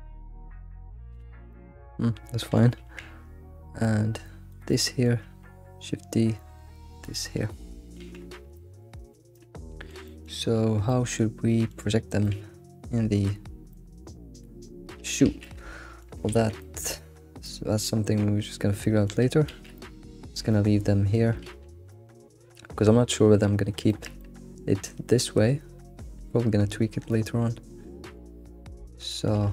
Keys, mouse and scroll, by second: 0.0 s, 1.2 s, 1.6-2.8 shift+middle drag, 3.0 shift+d, 4.8 shift+middle click, 6.8 shift+d, 7.6-8.0 scroll down 1, 8.3 scroll down 1, 8.7-10.3 middle drag, 10.5-10.9 scroll up 3, 10.9-12.1 middle drag, 12.1 scroll down 2, 12.3-13.1 middle drag, 13.9-15.3 middle drag, 15.3 alt+shift+z, 15.4-16.4 middle drag, 16.4 alt+x, 16.6-19.4 middle drag, 19.4 scroll down 1, 19.5 alt+shift+z, 19.8-20.3 middle drag, 20.3 alt+shift+z, 20.5-21.5 middle drag, 21.5 alt+shift+z, 21.9-27.2 middle drag, 28.9-29.5 shift+middle drag.